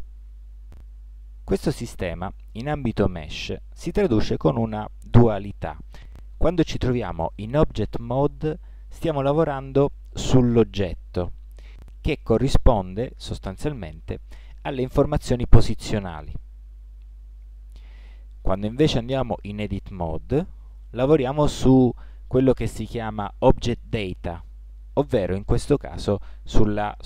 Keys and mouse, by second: 14.8 Tab, 20.2 Tab.